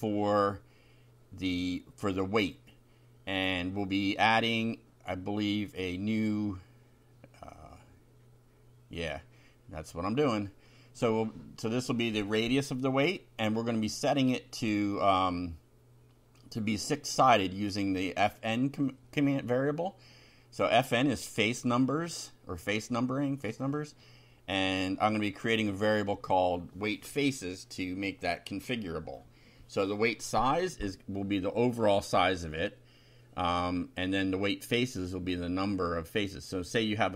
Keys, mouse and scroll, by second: 0.0 BackSpace, 0.2 2, 7.1 click, 8.7-12.2 typing, 12.6 Delete, 13.7 Right, 14.9 Left, 15.1 Delete, 15.2 1, 17.3 Right, 20.1 BackSpace, 20.3 ,, 20.4 space, 20.7 shift+4, 22.8-28.5 typing, 31.1 click, 32.4 ctrl+c, 32.9 ctrl+click, 33.7 Home, 34.1 Down, 35.0 ctrl+v.